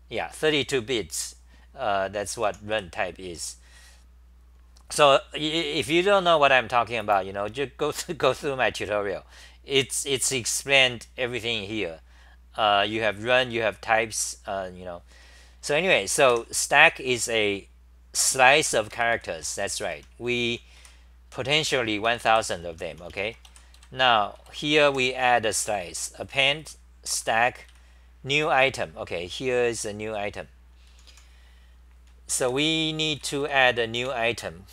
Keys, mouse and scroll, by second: 2.3 ctrl+g, 2.5 h, 2.7 1, 10.1 1, 16.3 ctrl+g, 16.3 2, 18.9 ctrl+g, 19.5-23.8 typing, 23.8 Right, 24.4 Return, 24.9 2, 25.9 ctrl+g, 27.1-28.2 typing, 29.2-30.9 scroll down 9, 30.9 h, 31.1 h, 33.0-34.0 typing.